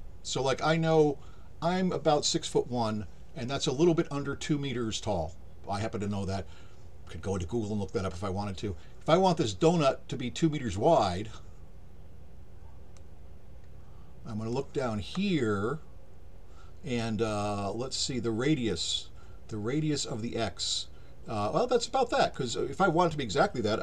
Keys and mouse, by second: 13.0-14.5 drag, 22.3 click.